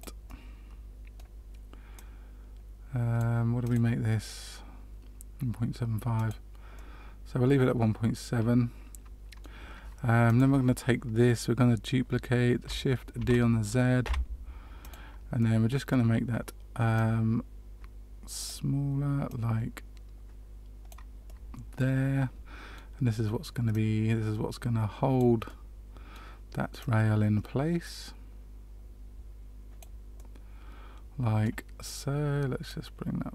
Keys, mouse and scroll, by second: 0.2 middle click, 1.9 click, 3.6 click, 6.1 click, 6.7 middle click, 10.2 click, 13.1 shift+d, 15.3 middle click, 16.9 click, 19.2 click, 21.2 middle click, 23.7 click, 25.4 middle click, 26.7 click, 30.1 middle click, 32.6 click.